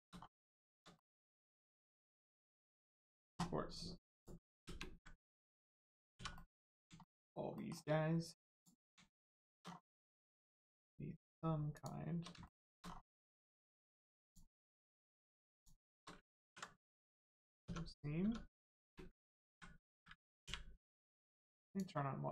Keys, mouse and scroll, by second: 1.0 middle click, 1.0 middle click, 1.3 scroll up 1, 2.2 click, 4.6 ctrl+space, 5.4 shift+space, 5.6 shift+middle click, 6.4 middle click, 6.4 middle click, 7.0 shift+middle click, 8.6 click, 8.8 scroll down 1, 9.2 shift+middle click, 9.7 scroll down 1, 10.2 shift+middle click, 11.7 shift+click, 12.4 shift+middle click, 12.8 scroll down 1, 13.2 shift+middle click, 14.2 shift+click, 15.6 shift+click, 17.2 click, 18.2 Tab, 18.8 ctrl+space, 21.6 click.